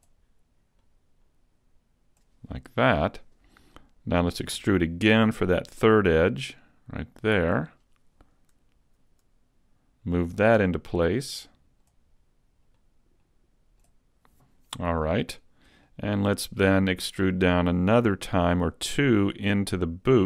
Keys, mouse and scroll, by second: 0.9 click, 2.1 click, 4.6 e, 7.5 click, 8.5 click, 10.1 click, 10.3 click, 12.8 click, 14.1 click, 14.9 click, 15.9 shift+middle click, 18.9 e.